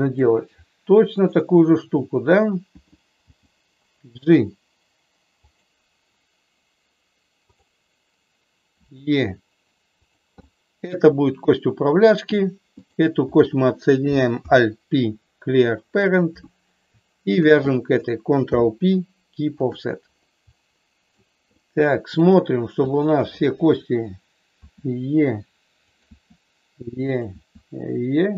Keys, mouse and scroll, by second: 3.2 g, 5.3 click, 7.4 click, 8.7 e, 9.9 click, 10.5-12.1 middle drag, 12.8 click, 14.3 alt+p, 17.3 shift+click, 18.3 ctrl+p, 20.4 middle click, 21.4 middle click, 22.7 click, 24.5 e, 25.8 click, 25.9 e, 26.9 click.